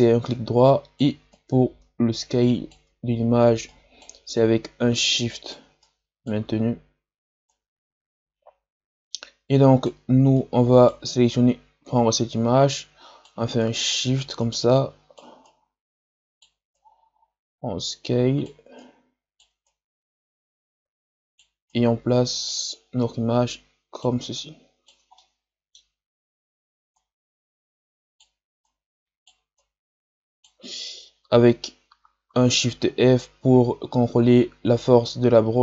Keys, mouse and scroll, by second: 3.0-3.6 scroll down 3, 3.6-6.5 right drag, 6.5-7.4 scroll up 2, 7.4-25.1 right drag, 25.1-26.9 middle drag, 26.9-32.5 right drag, 32.5 shift+f.